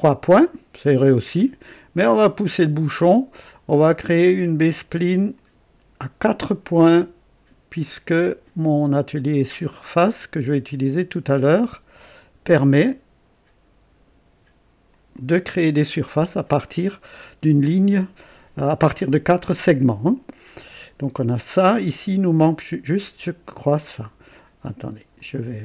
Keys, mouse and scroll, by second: 5.3 click, 12.1 click, 14.9 click, 15.9 right click, 16.6 right click, 20.5 right click, 22.4-24.3 drag, 25.1 click.